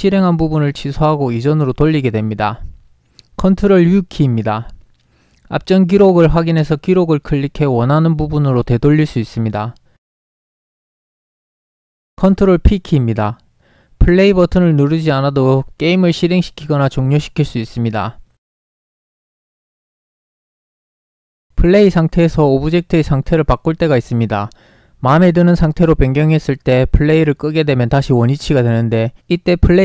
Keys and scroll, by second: 4.0 ctrl+u, 15.3 ctrl+p, 19.4 ctrl+p, 21.3 ctrl+p, 24.1 w, 28.4 r.